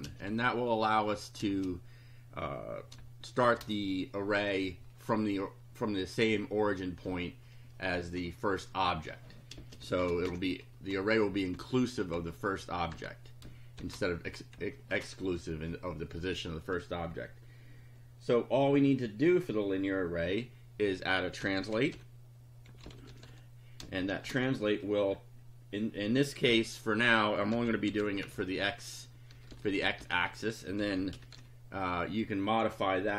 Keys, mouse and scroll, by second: 0.0-0.3 typing, 1.5 space, 3.4 shift+0, 9.6 space, 10.0 shift+[, 10.3 shift+Return, 11.6 Down, 12.2 Up, 13.0 Return, 13.8 shift+], 14.6 Up, 21.2-24.1 typing, 26.5-31.9 typing.